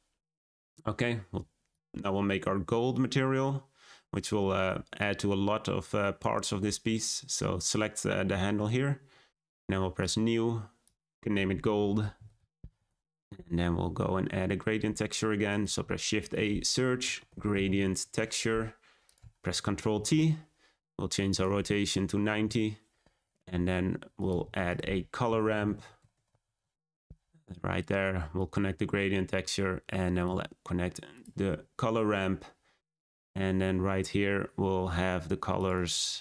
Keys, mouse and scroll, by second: 10.0-13.9 drag, 15.4 click, 17.9 shift+a, 19.9 ctrl+t, 22.4-26.5 drag, 26.5 shift+a, 28.3-29.4 drag, 30.2-31.1 drag.